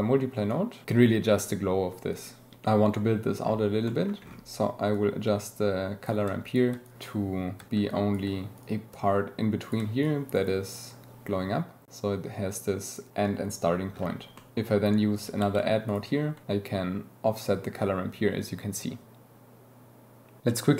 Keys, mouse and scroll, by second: 2.1 click, 3.8 click, 4.9-6.1 drag, 6.5 ctrl+click, 6.8-7.5 drag, 8.9 click, 9.6 ctrl+click, 10.0 click, 10.6 click, 11.8 click, 15.1 click, 15.8 click, 19.0-20.4 shift+middle drag, 20.4 shift+click, 20.5 shift+middle click, 20.6 shift+click, 20.7 shift+middle click.